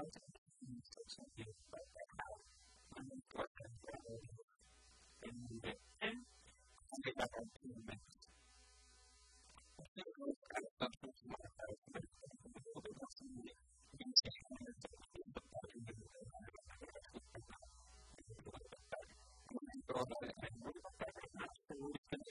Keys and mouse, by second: 0.4-2.3 middle drag, 2.1 a, 2.4 b, 3.0 b, 3.8 middle click, 4.6 click, 5.6 Tab, 6.1 click, 9.4-11.0 drag, 14.4 Tab, 14.9 ctrl+r, 16.4-17.8 middle drag, 18.0 middle click, 18.6 ctrl+z, 20.4-22.3 drag.